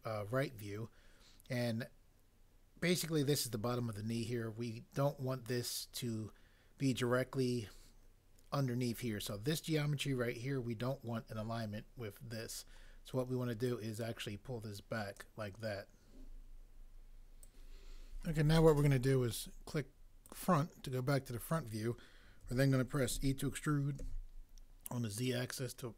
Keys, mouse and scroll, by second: 23.1 e, 24.0 z.